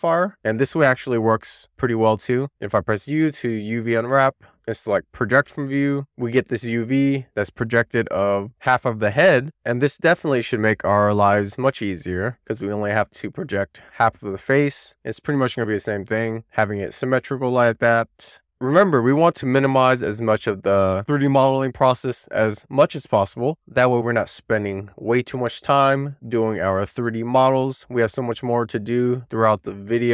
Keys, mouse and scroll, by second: 2.4 u, 9.0-9.9 scroll up 1, 9.9 a, 12.3 click, 16.7 Tab.